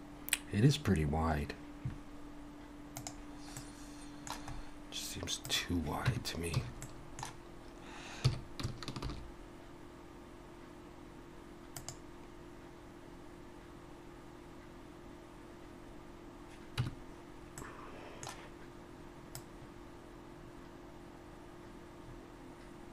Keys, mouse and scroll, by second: 3.6 middle click, 4.4-5.4 scroll up 2, 5.4 scroll up 1, 5.4 click, 6.1 Tab, 6.6 a, 6.8 middle click, 8.2 s, 16.8 Tab, 17.6 middle click, 19.3 click.